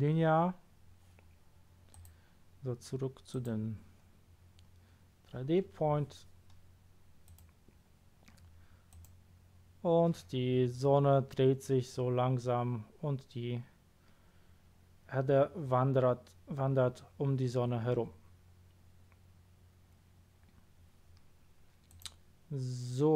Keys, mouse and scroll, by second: 1.9 click, 3.3 click, 4.2-4.6 scroll down 1, 4.6-5.1 scroll up 1, 7.2 click, 8.9 click, 21.9 click.